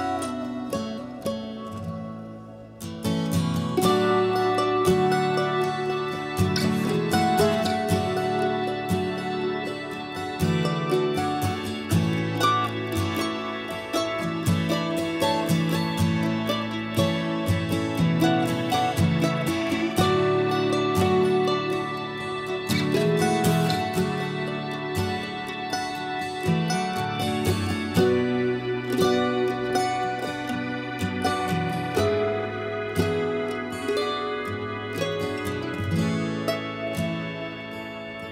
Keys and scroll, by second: 9.5 5, 11.0 space, 11.5 b, 23.7 b, 25.6 typing, 26.5 Escape, 26.6 Escape.